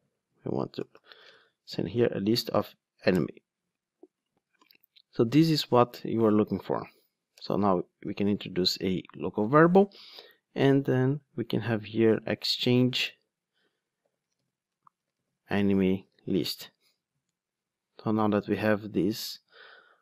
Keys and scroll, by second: 3.1 Return, 7.4 alt+Return.